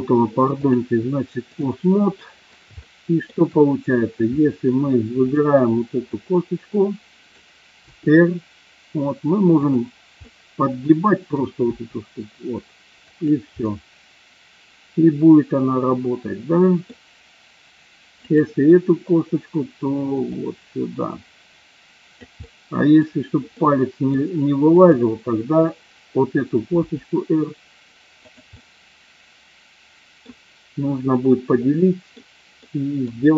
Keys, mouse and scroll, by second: 0.7-1.6 drag, 2.2 middle drag, 2.9 shift+middle drag, 4.3 middle click, 5.1-5.6 drag, 6.1-7.4 middle drag, 7.9 r, 10.2-11.4 middle drag, 11.6 r, 13.0 click, 13.6-16.9 middle drag, 18.1 click, 20.4-22.3 drag, 22.4 middle click, 23.5 scroll up 1, 23.6-24.3 middle drag, 24.7 click, 26.7 r, 28.2 click, 28.5-28.8 middle drag, 29.0-30.2 middle drag, 31.5-32.1 middle drag, 32.6 middle drag.